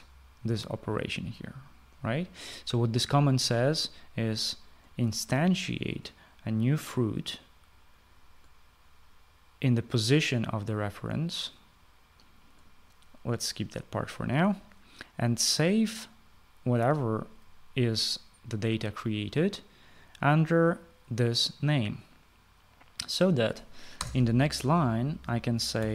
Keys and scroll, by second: 24.6 Return.